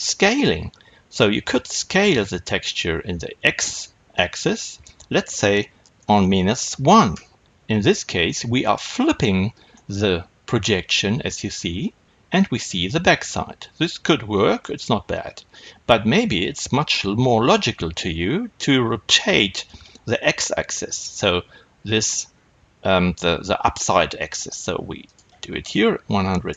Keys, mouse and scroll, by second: 7.1 KP_Enter, 9.6-17.3 middle drag, 17.3-26.5 drag, 17.4 KP_Enter, 21.0-24.7 scroll down 1.